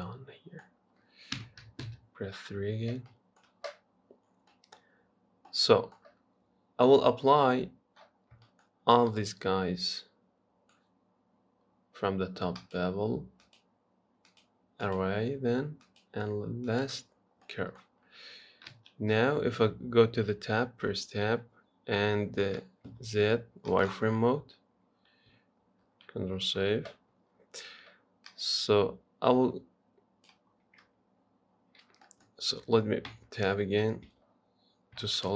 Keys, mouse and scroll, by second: 0.8-1.6 scroll down 3, 1.6 KP_1, 2.1 KP_3, 2.7-3.3 scroll down 1, 3.3-4.5 shift+middle drag, 4.5 scroll down 1, 4.7 middle click, 5.3-5.7 scroll up 1, 5.7-8.4 middle drag, 8.4-9.3 scroll up 6, 8.7 shift+middle click, 9.3-12.4 middle drag, 12.8-17.4 drag, 17.4 scroll down 2, 17.7 middle click, 18.1 scroll up 1, 18.3 scroll down 2, 18.9 KP_3, 19.5 Tab, 20.3-23.1 scroll up 1, 23.1 z, 26.5 ctrl+s, 28.5 click, 31.2-31.7 scroll up 1, 31.7 scroll down 1, 32.0 scroll up 3, 32.3-33.3 middle drag, 33.3 Tab, 33.6 scroll down 2, 34.3 z, 34.9-35.3 scroll down 2.